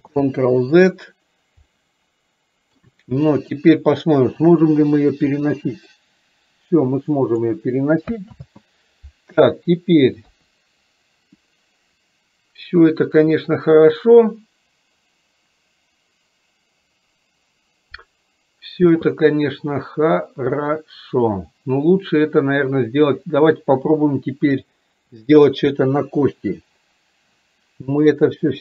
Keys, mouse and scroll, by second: 1.8-2.8 middle drag, 3.2-3.7 middle drag, 5.5-7.5 drag, 8.5 ctrl+z, 28.3 click.